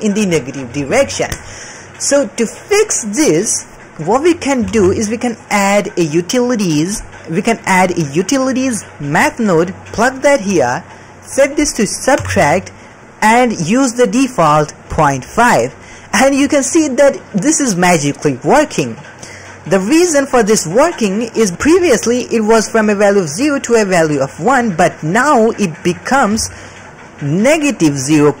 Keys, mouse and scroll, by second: 4.5 middle click, 4.6 shift+a, 11.2-12.2 drag, 12.6 click, 15.4 ctrl+middle click, 21.9 middle click, 24.2 middle click, 24.9 middle click, 25.6 middle click, 26.3-28.4 typing, 26.7-27.2 drag, 27.8 click.